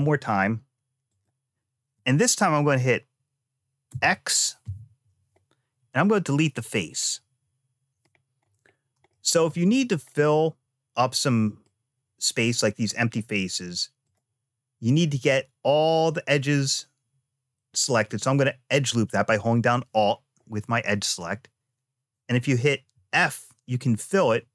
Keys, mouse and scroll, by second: 3.6 x, 6.9 middle click, 8.2-8.5 scroll up 2, 8.8 shift+middle click, 9.9-11.4 middle drag, 13.8 click, 18.4 alt+click, 22.7 f.